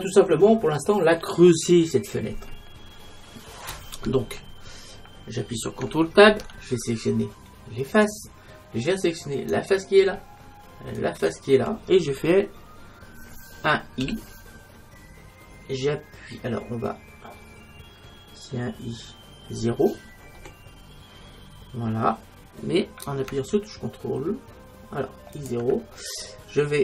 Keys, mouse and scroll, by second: 6.4 ctrl+Tab, 14.1 i, 25.5-26.8 drag.